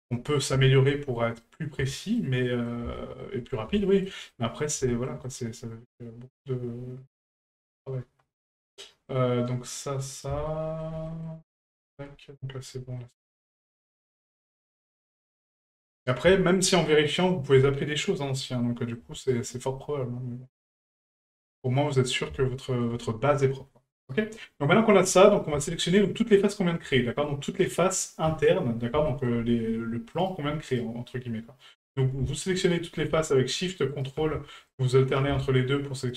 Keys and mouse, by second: 0.0 middle drag, 0.6 shift+middle drag, 1.1 middle drag, 1.9-2.2 shift+middle drag, 2.4 middle drag, 3.0 shift+middle drag, 3.8 shift+middle drag, 4.3-4.6 middle drag, 4.9 shift+middle drag, 5.2-10.2 middle drag, 10.5-10.8 shift+middle drag, 11.1 middle click, 11.7 shift+middle drag, 13.0 middle click, 13.5-13.9 shift+middle drag, 14.1 middle drag, 14.7-15.1 middle drag, 15.3 shift+middle drag, 15.7-16.1 middle drag, 16.3 shift+middle drag, 16.7-17.1 middle drag, 17.9-18.4 shift+middle drag, 18.6-19.0 middle drag, 19.3 shift+middle drag, 19.8-22.1 middle drag, 22.6 shift+middle drag, 24.8 click, 25.6 shift+middle drag, 25.9 middle drag, 26.9 shift+middle drag, 29.1 shift+middle click, 30.2 right click, 30.7 shift+right click, 31.8 shift+right click, 32.6 ctrl+right click, 33.9 shift+right click, 34.7 ctrl+right click, 36.0 shift+right click.